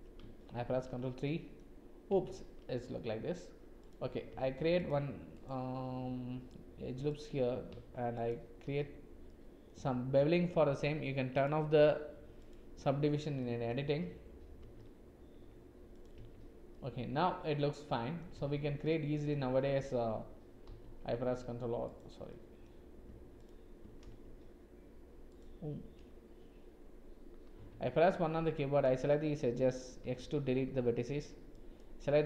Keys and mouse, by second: 0.7 ctrl+3, 1.2 middle click, 2.1 Tab, 2.8 click, 4.2 ctrl+r, 8.2 alt+shift+click, 9.2 click, 13.3 click, 14.6 ctrl+b, 16.2 Tab, 16.7 middle click, 16.8 click, 17.4 middle click, 18.4 Tab, 18.9 middle click, 20.6 ctrl+r, 22.2 click, 24.0 ctrl+r, 30.0 x, 31.5 click.